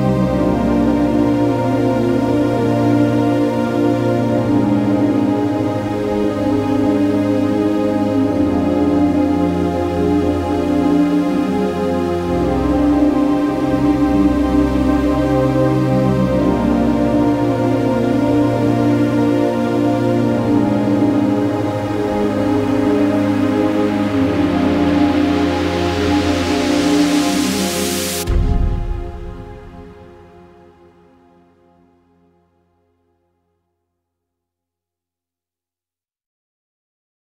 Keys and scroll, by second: 4.1 super+-, 4.7 v, 4.8 space, 7.9 super+y, 10.3 super+y, 10.8 v, 11.0 v, 14.0 z, 14.2 z, 14.3 z, 15.9 super+-, 16.0 super+-, 16.2 super+-, 16.8 super+-, 17.1 super+z, 17.4 v, 19.0 shift+super+}, 19.5 v, 20.0 z, 20.2 z, 20.4 z, 26.3 z, 26.4 z, 29.1 super+-, 29.3 super+-, 29.4 super+-, 31.4-32.9 typing, 34.5 BackSpace, 35.4 z, 36.5 v, 36.6 space.